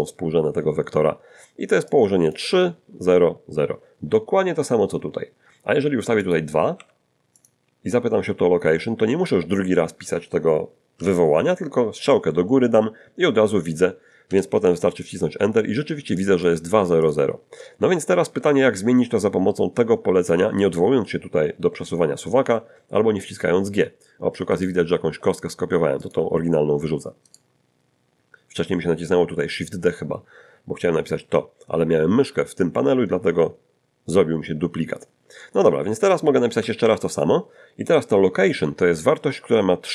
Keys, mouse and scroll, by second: 1.9 click, 6.2 click, 6.7 2, 7.4 click, 10.9 Up, 14.3 Return, 16.2 click, 17.0 click, 18.8-20.5 drag, 24.5 right click, 25.7 x, 26.0 click, 27.3 right click, 36.8 Up.